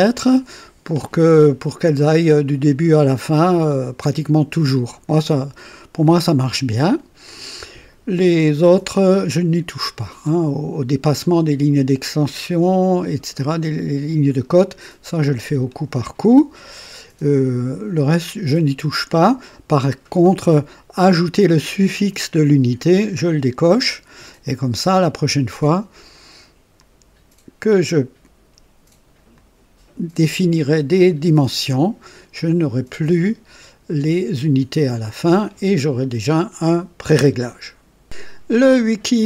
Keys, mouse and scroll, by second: 23.0 click, 26.6 click, 29.2 click, 38.0 click.